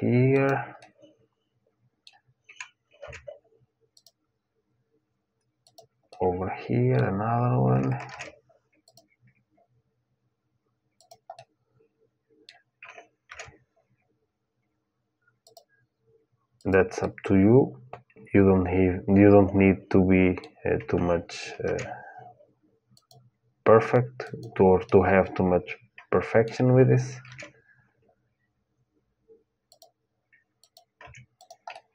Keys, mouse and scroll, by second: 0.5-2.7 middle drag, 2.8 ctrl+r, 5.9-7.8 middle drag, 7.8 ctrl+r, 11.1-13.3 middle drag, 13.0 ctrl+r, 16.7-18.7 middle drag, 21.4 ctrl+r, 24.6-26.6 middle drag, 27.0 ctrl+r, 30.8 Tab, 31.1-31.9 drag, 31.5 middle click.